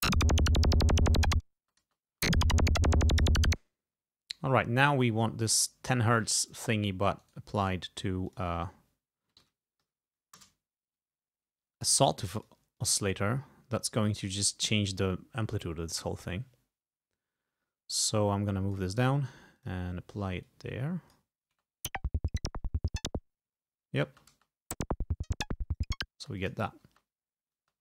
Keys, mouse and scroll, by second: 1.7 space, 3.6 space, 6.6 click, 7.3 right click, 8.4 click, 9.5 1, 9.9 0, 10.4 Return, 12.5 click, 12.8 click, 18.0 click, 19.6 click, 20.5-21.6 drag, 21.6 space, 24.2 space, 26.3 space, 26.5 click, 27.7 space.